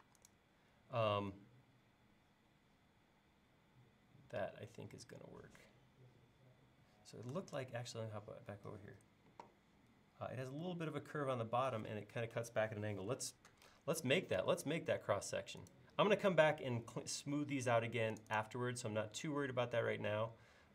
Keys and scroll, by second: 0.0 space, 7.6 super+Tab, 13.5 super+Tab.